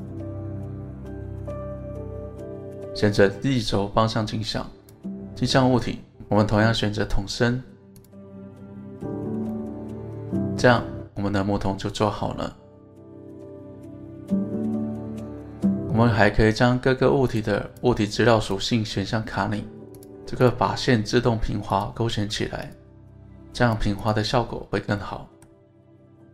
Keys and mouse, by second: 0.0 click, 4.0 click, 4.8 click, 6.0 click, 9.5-12.8 middle drag, 13.2-15.9 middle drag, 15.9 click, 17.3 click, 17.7 click, 18.5 click, 19.5 click, 20.4 click, 21.8 click, 22.6 click, 23.6 click, 25.0-25.5 middle drag, 26.0-26.3 middle drag.